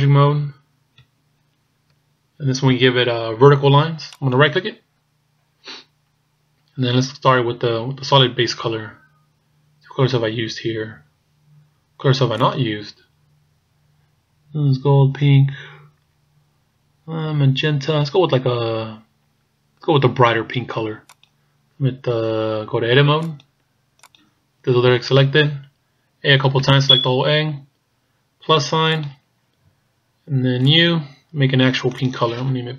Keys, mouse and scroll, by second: 0.0-0.5 scroll down 2, 1.1-1.6 shift+scroll up 1, 4.4 right click, 8.1-8.7 scroll down 2, 12.4 click, 23.2 click, 24.4 click, 26.4 a, 26.7 a, 29.0 click, 30.7 click, 32.0 click.